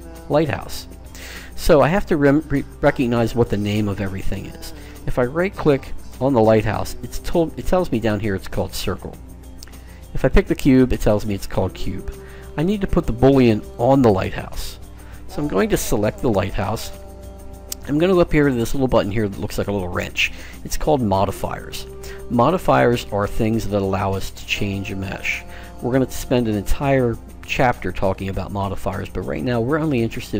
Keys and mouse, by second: 3.4-5.0 right drag, 10.2-11.9 right drag, 13.5-15.4 right drag, 21.6-23.4 drag.